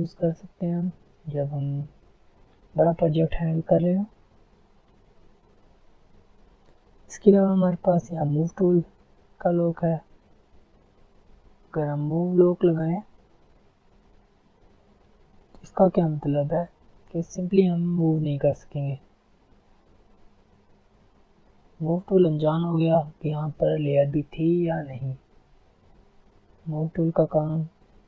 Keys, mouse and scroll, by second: 0.2 alt+scroll down 1, 0.4 alt+scroll, 0.5 alt+scroll up 1, 1.3 alt+scroll down 1, 2.2 alt+scroll up 1, 4.1 alt+scroll up 1, 5.3 click, 5.7 alt+scroll down 1, 6.1 alt+scroll up 1, 8.2 click, 10.5 click, 15.2-16.3 alt+scroll down 2, 16.3 click, 16.9 alt+scroll up 1, 18.5-25.6 drag, 25.6 alt+scroll down 1, 26.1 alt+scroll up 1, 26.5 alt+scroll down 1, 26.9 alt+scroll up 1.